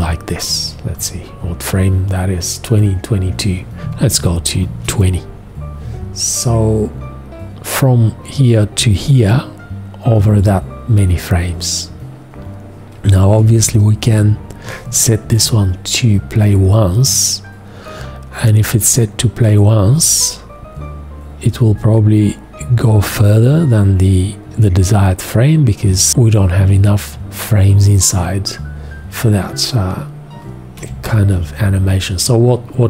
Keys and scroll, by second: 13.3 v, 15.3 2, 30.7 4.